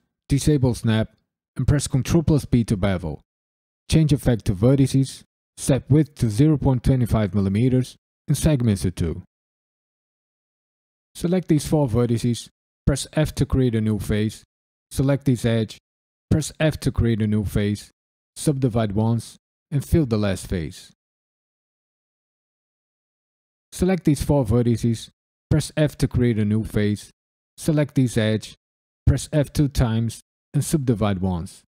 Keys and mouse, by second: 0.3 click, 1.6 ctrl+b, 2.9 click, 4.6 click, 5.5-8.9 drag, 9.9 click, 10.3 shift+click, 10.7 shift+click, 11.2 shift+click, 12.0 KP_Decimal, 13.2 f, 14.2 click, 15.3 shift+click, 16.5 f, 17.7 ctrl+r, 18.0 click, 18.4 click, 18.4 right click, 19.9 f, 20.1 shift+middle click, 20.8 shift+click, 21.0 shift+click, 21.1 f, 21.6 f, 21.8 ctrl+r, 22.0 click, 22.1 right click, 22.3 click, 22.5 f, 22.9 shift+middle click, 23.2 drag, 23.6 shift+click, 25.7 f, 27.4 click, 28.0 shift+click, 28.4 f, 29.0 f, 29.8 ctrl+r, 30.2 click, 30.7 right click, 30.9 shift+middle click, 31.5 shift+click, 31.7 shift+click.